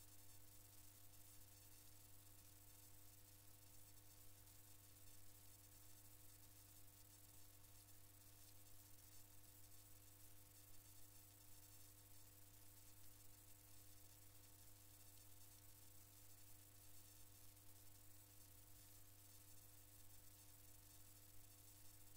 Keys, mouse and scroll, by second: 3.1 click, 4.8-5.1 scroll up 2, 5.1 scroll down 1, 5.2 scroll up 1, 10.1 click, 13.5 click, 14.6-16.2 scroll down 1, 17.1-18.8 drag.